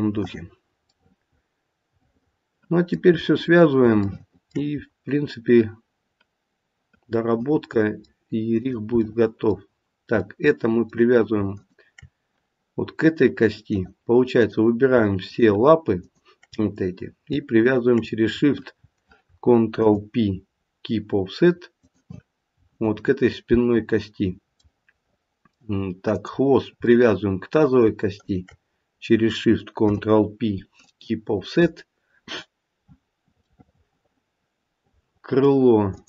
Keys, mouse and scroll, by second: 0.8 middle click, 3.2-3.7 scroll up 2, 4.7-6.2 scroll up 2, 7.6 middle click, 8.6 click, 9.0 middle click, 11.5 shift+click, 13.7 click, 14.3 click, 15.3 shift+click, 15.9 shift+click, 19.7 ctrl+p, 24.2-24.6 scroll down 1, 24.6 middle click, 26.0 middle click, 26.0 click, 26.9 middle click, 28.1 shift+click, 29.7 ctrl+p, 33.2 scroll down 1, 33.4 middle click, 33.8 middle click, 35.9 click.